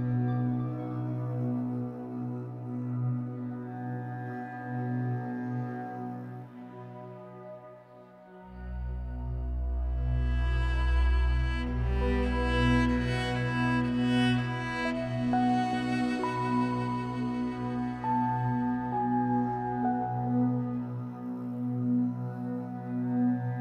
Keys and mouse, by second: 0.7 s, 2.0 click, 2.6 s, 3.1-4.1 drag, 4.3-5.9 alt+drag, 7.4 click, 7.4 typing, 8.3 click, 9.6-10.3 typing, 12.0-13.1 alt+drag, 13.6-14.4 typing, 13.9 click, 14.9 click, 15.1 click, 15.8 click, 16.7 click, 20.0-23.6 ctrl+s, 20.7-22.9 alt+drag, 22.9 7.